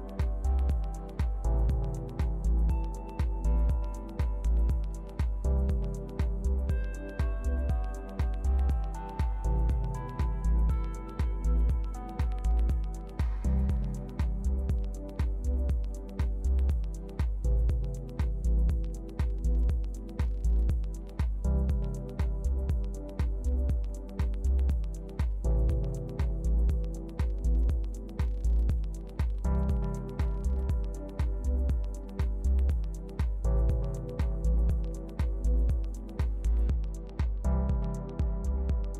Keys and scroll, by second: 17.0 alt+u, 17.9 alt+Page_Down.